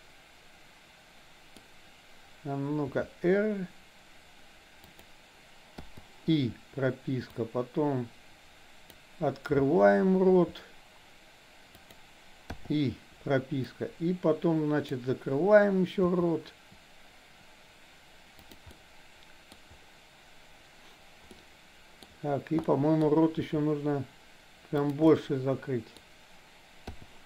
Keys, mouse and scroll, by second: 2.9 r, 5.8 i, 7.4-8.9 drag, 10.3 r, 12.6 i, 13.7-14.9 drag, 16.2 r, 18.7-19.6 middle drag, 21.3-22.1 middle drag, 22.7 middle click, 23.2 r, 25.1 middle click, 26.9 i.